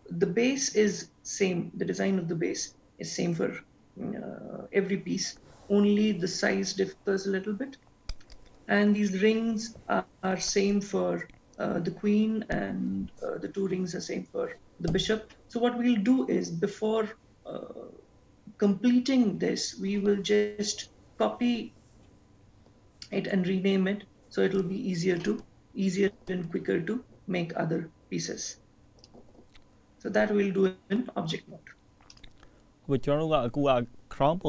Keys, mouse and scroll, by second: 29.1 click, 32.6 click.